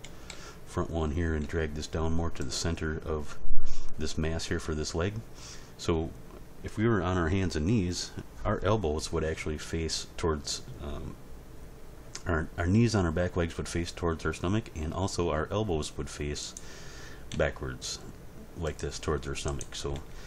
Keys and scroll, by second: 0.0 End, 0.3 Page_Down, 1.4 g, 17.3 g, 19.9 g.